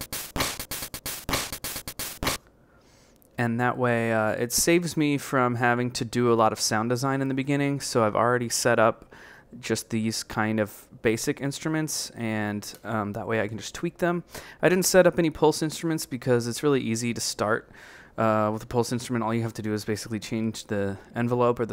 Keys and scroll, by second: 3.1 Left, 4.3 b, 4.7 Left, 5.6 Right, 6.4 Right, 8.1 b, 8.5 Right, 9.3 Right, 10.8 Right, 11.5 Left, 13.8 Left, 14.2 Left, 14.7 Left, 15.1 a, 15.9 Right, 16.6 Right, 17.3 Right, 18.7 a, 20.3 Left, 21.1 Left.